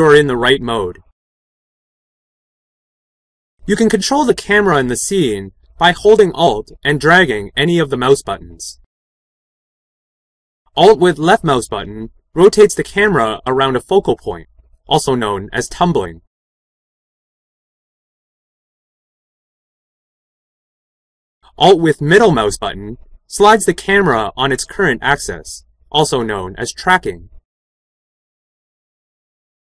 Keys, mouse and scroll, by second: 10.1-16.7 drag, 20.9-27.7 middle drag.